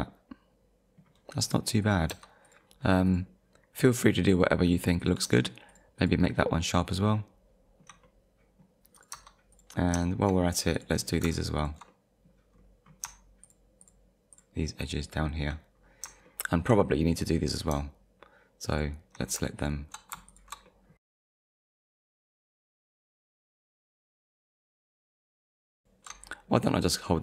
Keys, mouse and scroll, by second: 1.3 scroll up 1, 1.8 click, 2.1 Tab, 2.5 click, 3.1 click, 3.8 right click, 4.7 click, 5.3 Tab, 5.7 click, 6.0 click, 6.3 middle click, 6.7-7.1 scroll down 1, 7.1 middle click, 8.0 middle click, 9.0 click, 9.1 Tab, 9.5 click, 10.0 shift+middle click, 10.8 click, 11.6 ctrl+click, 11.9 middle click, 12.5 scroll up 1, 13.4 shift+click, 13.8 shift+click, 14.3 shift+click, 14.8 shift+click, 15.8-16.2 scroll down 2, 16.3 shift+middle click, 18.7 shift+click, 19.6 ctrl+click, 20.3 ctrl+click, 20.7 middle click, 21.0 scroll up 1, 21.2 shift+click, 21.4 ctrl+click, 21.6 middle click, 22.2 middle click, 22.5 shift+click, 22.7 ctrl+click, 22.8 shift+scroll down 1, 22.9 shift+middle click, 23.1 ctrl+click, 23.2 shift+click, 23.5 shift+click, 23.7 scroll down 2, 23.8 shift+middle click, 23.9 scroll up 2, 24.1 shift+click, 24.4 ctrl+click, 24.5 shift+middle click, 24.9 ctrl+click, 25.0 shift+middle click, 25.2 ctrl+click, 25.3 shift+middle click, 25.8 alt+shift+click.